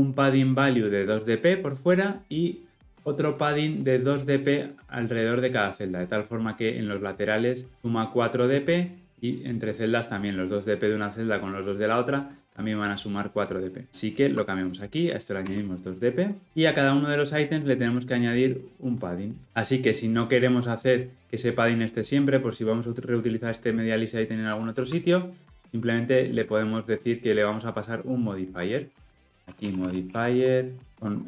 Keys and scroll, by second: 30.9 Return.